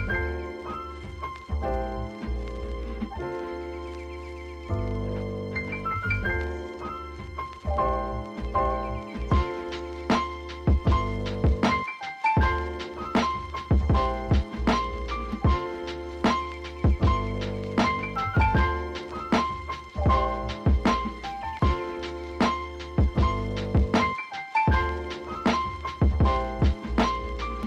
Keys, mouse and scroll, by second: 0.4 click, 1.7-3.3 drag, 4.5 scroll up 1, 5.3 click, 5.8 click, 6.6 g, 7.7 shift+click, 8.3 g, 9.6-10.1 scroll down 1, 10.1-11.3 shift+drag, 11.3-11.8 scroll down 2, 12.0-13.1 scroll down 8, 13.1-14.1 shift+drag, 14.1 s, 15.5 g, 16.2 ctrl+c, 16.3 ctrl+v, 16.4 g, 18.6 shift+click, 19.4 ctrl+z, 19.7 click, 20.2-21.3 shift+drag, 21.3 KP_3, 21.6-22.2 scroll up 3, 21.8 shift+middle click, 22.2 g, 25.9-27.4 shift+drag, 27.4 s.